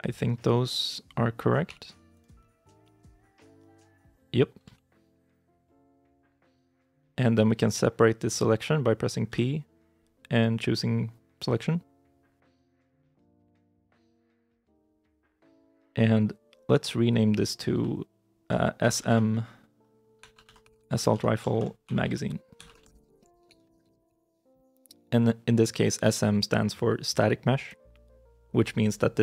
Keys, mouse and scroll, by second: 1.5 g, 2.3 middle click, 4.6 ctrl+z, 5.2 middle click, 6.2 shift+middle click, 14.0 Tab, 14.9 right click, 15.2 scroll down 1, 15.5 middle click, 16.3-17.6 scroll up 1, 17.6 F2, 18.7 shift+s, 18.8 shift+m, 18.9 shift+-, 20.1-24.4 typing.